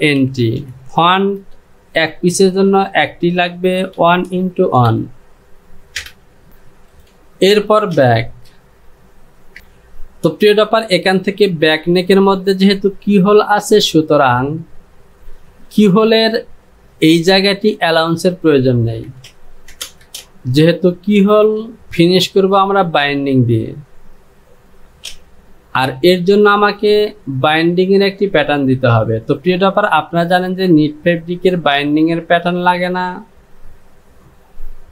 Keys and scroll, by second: 0.0-1.3 typing, 4.0-5.0 typing, 6.0 Return, 8.0 Home, 19.2 Down, 19.8 KP_0, 19.9 Down, 20.1 KP_0, 20.3 Down, 25.2 j.